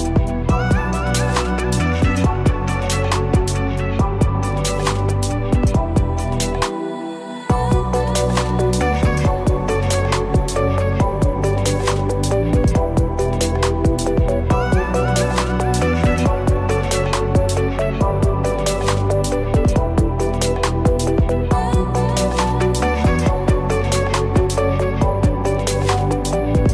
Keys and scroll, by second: 1.2 ctrl+a.